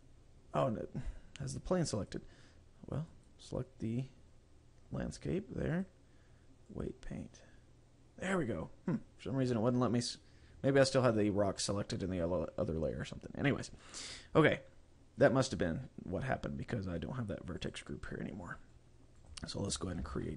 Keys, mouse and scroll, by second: 1.5 click, 2.3 click, 3.4 right click, 5.8 click, 8.7-10.5 scroll up 2, 13.2-13.6 scroll up 1, 17.7 click.